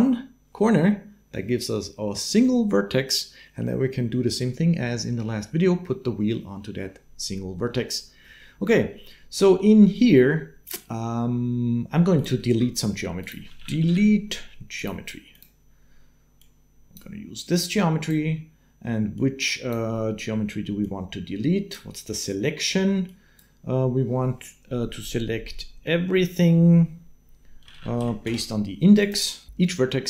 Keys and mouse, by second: 8.8 click, 12.0 click, 12.4 shift+a, 16.2-17.9 drag, 19.0 click, 19.9 click, 20.8 click, 22.9-29.0 drag.